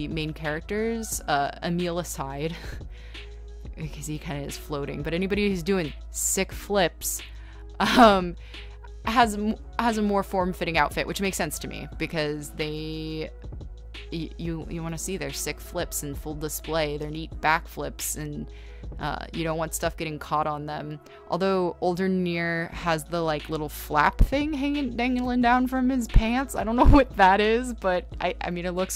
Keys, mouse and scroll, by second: 3.5 ctrl+z, 4.9 ctrl+z, 5.0 b, 6.4 ctrl+z, 6.8-8.3 typing, 10.3-11.8 typing.